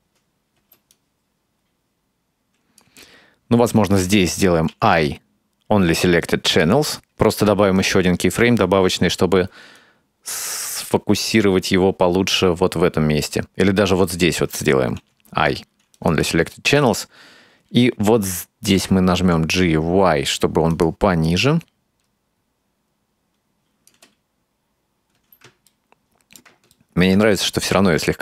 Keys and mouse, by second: 0.6 space, 0.9-2.9 drag, 4.7 i, 7.4 right click, 9.8-14.3 drag, 15.0 i, 16.8 right click, 18.8 g, 21.3-24.0 drag, 24.0 space, 25.2 space, 25.7 middle click, 26.8 middle click, 27.6 right click.